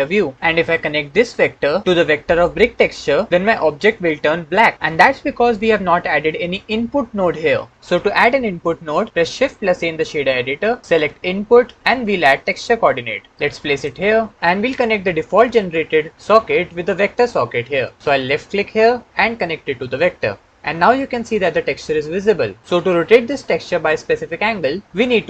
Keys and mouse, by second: 1.4-2.7 drag, 9.3 shift+a, 18.1 click, 19.2-19.9 drag.